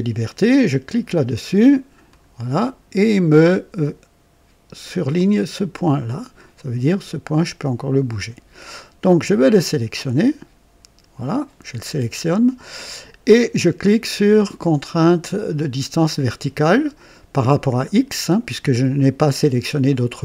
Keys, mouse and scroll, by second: 0.8 click, 2.1 click, 6.8-8.4 drag, 10.1 click, 11.2 click.